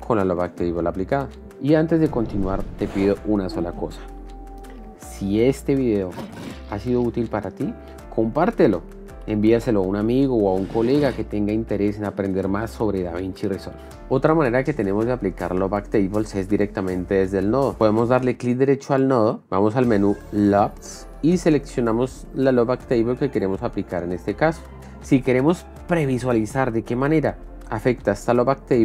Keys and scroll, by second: 14.0 ctrl+Home.